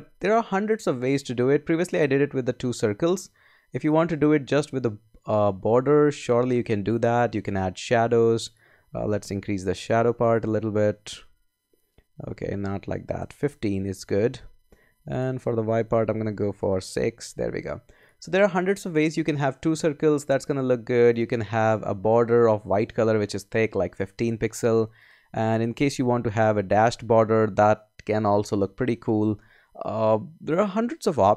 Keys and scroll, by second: 9.4 Down, 9.9 Up, 12.1 Down, 13.2 Up, 13.9 Down, 15.9 Up, 26.1 Up, 28.5 Up.